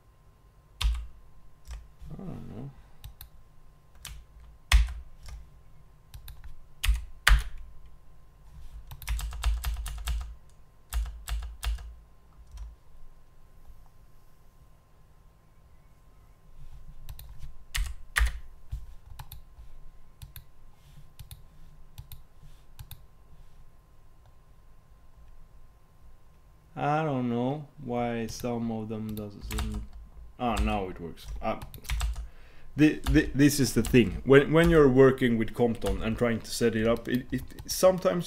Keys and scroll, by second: 9.3 super+Tab.